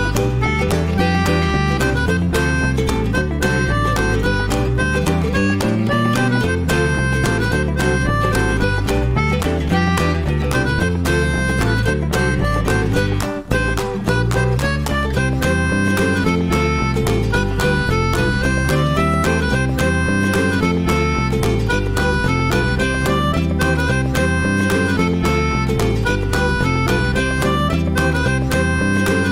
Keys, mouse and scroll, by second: 1.4-9.8 drag, 9.8-10.3 scroll down 1, 10.3 click, 11.6-13.8 shift+middle drag, 13.8-19.1 drag, 19.1-20.1 middle drag, 20.1 click, 20.4-22.3 middle drag, 22.3 click, 22.6 click, 23.1 drag, 23.9 click, 24.4-24.8 scroll down 2, 24.8-25.3 middle drag, 25.3 scroll down 1, 25.4 shift+middle drag, 25.6 scroll up 1, 25.9-27.8 middle drag, 27.8 scroll up 2, 29.1 drag.